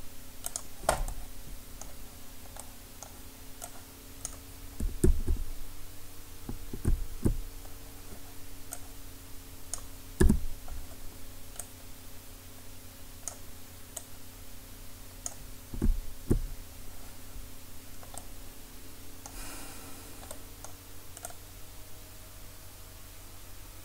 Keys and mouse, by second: 3.5 middle click, 3.7-6.9 drag, 5.0 KP_1, 6.9 KP_3, 8.7-11.4 drag, 10.2 KP_1, 11.6-15.8 drag, 15.8 KP_3, 20.4-21.3 middle drag, 21.3-23.0 drag.